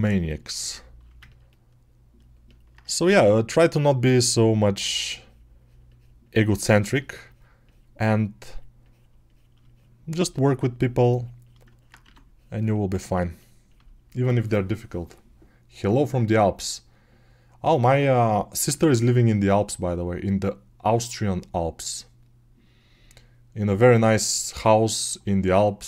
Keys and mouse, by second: 2.9 2, 11.9 1.